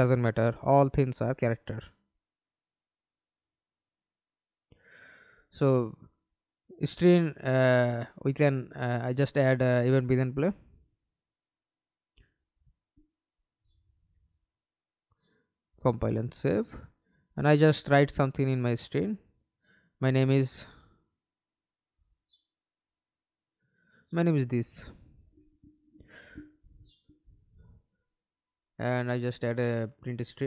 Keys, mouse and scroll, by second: 1.0 right click, 5.0 right click, 5.7-6.2 scroll up 1, 6.2 right click, 7.5-11.1 typing, 11.1 Return, 11.8-12.6 scroll up 2, 12.6-15.6 scroll up 1, 17.9-23.4 typing, 26.0-27.8 typing.